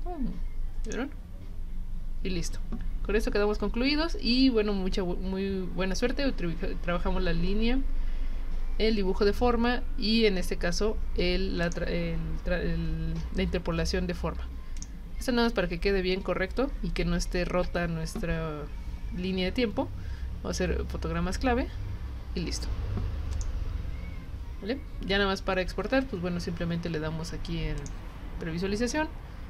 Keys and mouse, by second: 0.9 click, 11.6 click, 14.8 shift+click, 21.7 F6, 23.3 click, 27.8 click.